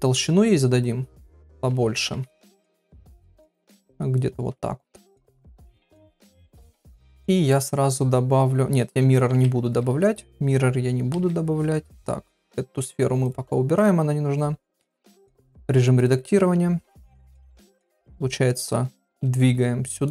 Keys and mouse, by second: 0.8 click, 1.9 ctrl+a, 3.3 click, 5.5 middle click, 7.0 click, 7.5 click, 9.3 KP_1, 11.1 KP_3, 13.2 click, 13.7 click, 14.7 KP_1, 15.1 Tab, 18.0 g.